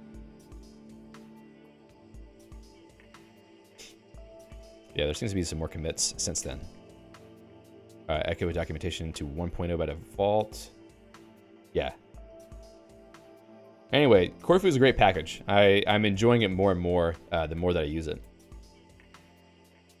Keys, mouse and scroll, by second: 17.5 ctrl+g, 19.4 d, 19.6 d.